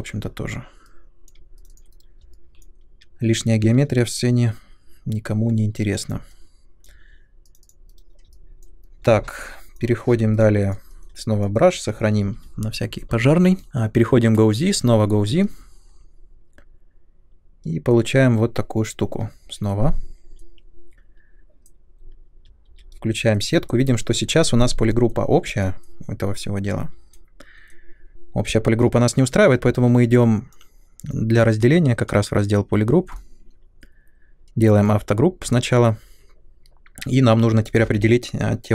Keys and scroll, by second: 1.9 Delete, 7.9 Delete, 12.1 ctrl+s, 22.6 shift+f.